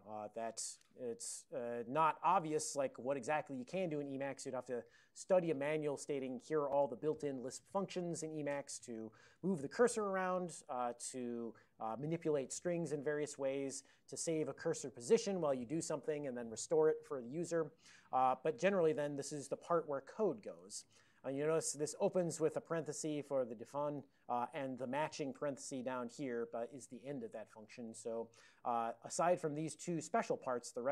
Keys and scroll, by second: 1.7 alt+o, 2.1 alt+o, 2.7 ctrl+g, 3.4 ctrl+a, 19.8 Down, 19.8 Up, 20.3 Down, 20.6 Up, 21.4 Up, 21.5 Up, 21.7 Up, 22.8 ctrl+f.